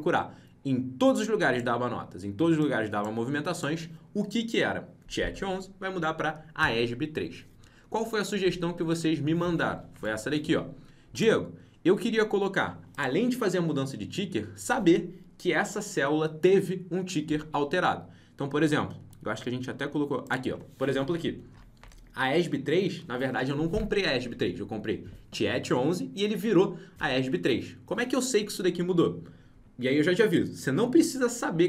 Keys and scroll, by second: 9.9 alt+Tab.